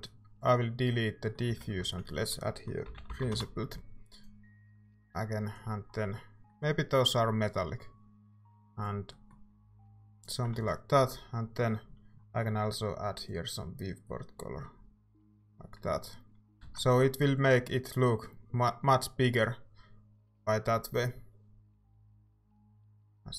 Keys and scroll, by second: 1.5-3.7 typing, 6.9 typing, 10.6 ctrl+s, 15.9 Tab, 16.2-17.1 typing.